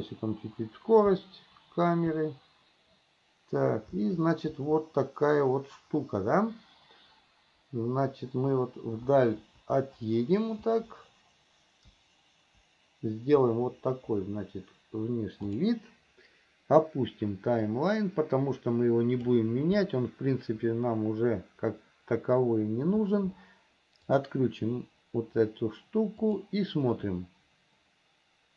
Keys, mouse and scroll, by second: 18.1-19.7 drag, 24.3 click, 26.4 click.